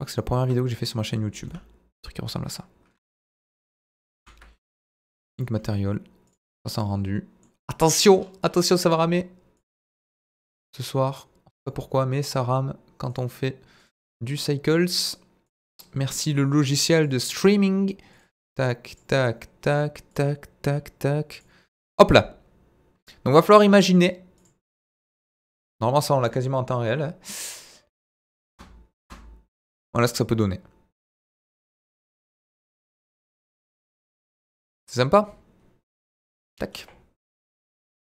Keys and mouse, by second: 1.4 b, 4.2 ctrl+l, 6.3 click, 6.8-7.4 middle drag, 8.9 click, 9.6-10.3 drag, 10.7-11.3 drag, 13.1 drag, 14.8 click, 15.5 click, 18.8 click, 20.0 click, 21.3 click, 24.3 click, 28.4 space, 28.9 space, 36.3 click, 37.8 click.